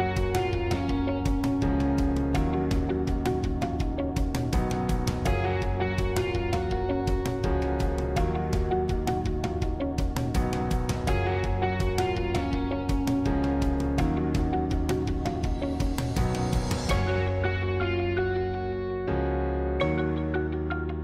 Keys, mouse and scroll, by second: 1.0 shift+d, 3.2 s, 5.6-7.0 middle drag, 7.0 scroll down 1, 7.1-8.4 middle drag, 8.4 e, 12.0-15.1 middle drag, 19.7 ctrl+z, 20.4-21.0 middle drag.